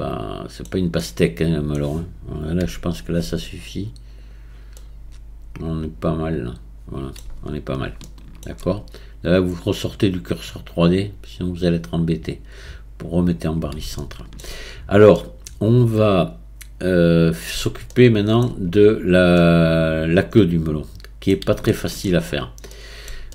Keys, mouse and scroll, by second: 2.6 Tab, 4.2 click, 4.8-7.8 middle drag, 8.0-10.8 shift+middle drag, 10.8-13.9 drag, 14.0-14.7 shift+middle drag, 14.7-15.1 scroll up 1, 15.1-18.8 middle drag, 18.8-19.4 scroll up 1, 19.4-22.3 middle drag, 22.3-22.7 scroll up 1, 22.7-23.3 middle drag.